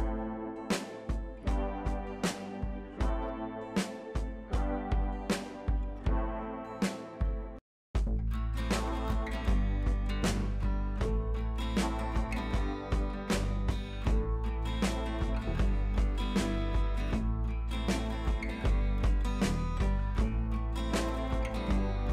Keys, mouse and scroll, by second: 1.1 b, 1.9-2.5 ], 3.1 ], 3.5 right click, 4.3 click, 4.7 ], 5.1 click, 7.8 ctrl+t, 8.9-11.3 shift+drag, 13.1 shift+click, 16.5-20.3 drag, 20.8 ctrl+t, 21.7-22.1 drag.